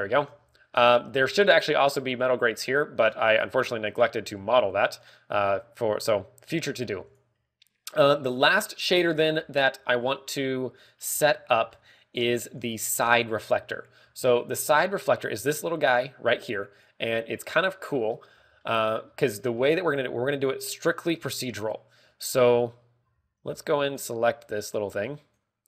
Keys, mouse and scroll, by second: 1.0 shift+middle click, 1.4-1.9 scroll up 3, 1.7 middle click, 2.3 scroll up 2, 4.0-4.4 scroll down 3, 4.4 middle click, 5.1 middle click, 5.6 scroll up 2, 6.5 middle click, 7.0 scroll up 1, 8.0 click, 22.1 click, 22.3 click, 23.9 z, 24.4 z, 25.4 right click.